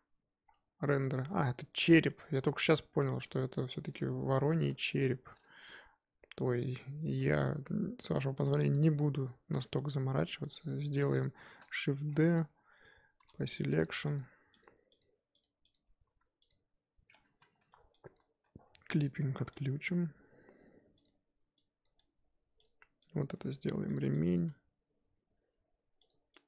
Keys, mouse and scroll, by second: 0.0 click, 0.4-1.6 scroll up 3, 2.7-4.9 shift+middle drag, 4.9 click, 6.4 Tab, 7.9 Tab, 8.6 click, 9.9-11.1 scroll up 3, 11.1 click, 11.5 shift+d, 12.1-12.5 scroll down 4, 12.5-13.4 scroll up 4, 13.4 p, 13.8 Tab, 14.1 click, 14.6 click, 15.0 click, 15.4 click, 15.7 click, 16.1 z, 16.5 click, 17.1 Tab, 17.4 z, 17.6 1, 18.1 click, 19.0 click, 19.5 g, 21.8 click, 21.9 g, 23.2 click, 23.3 g, 24.3 click, 24.4 g.